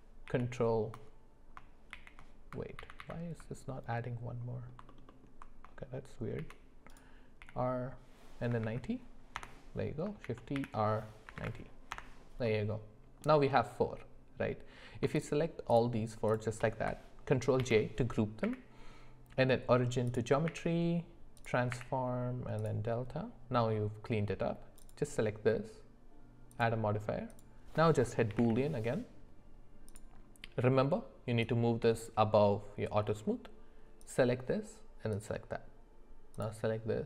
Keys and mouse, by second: 0.3 shift+r, 2.8 ctrl+z, 3.0 ctrl+z, 3.9-4.7 middle drag, 4.9 alt+middle click, 5.1 alt+middle click, 6.4 shift+d, 7.4 r, 10.2 shift+d, 12.4 middle click, 15.7 shift+click, 16.3 shift+click, 17.6 ctrl+j, 18.4 q, 20.4 q, 21.7 q, 23.1-24.4 middle drag, 24.8 click, 26.5-30.0 drag, 31.4-32.1 drag, 34.0 click.